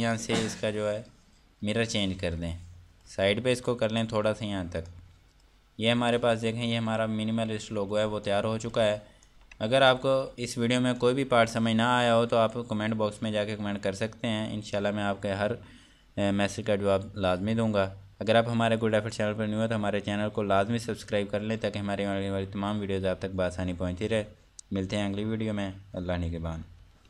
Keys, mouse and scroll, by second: 2.4 click, 5.3 click, 7.1 shift+F2, 8.0-8.5 scroll down 1, 8.5 click, 10.4 F2, 11.5 click.